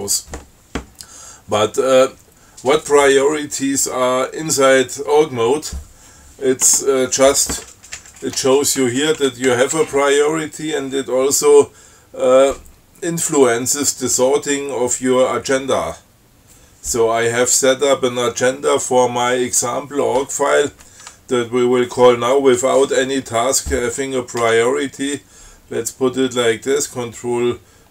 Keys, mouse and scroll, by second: 8.3 shift+Up, 9.3 shift+Up, 24.7 ctrl+c.